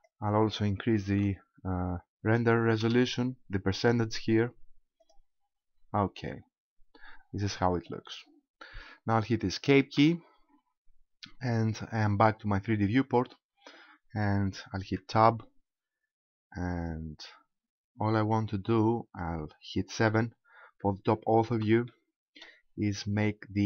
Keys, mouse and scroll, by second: 10.0 Escape, 15.0 Tab, 18.4 KP_1, 20.0 KP_7, 21.9 shift+middle click, 22.5-23.6 scroll up 12.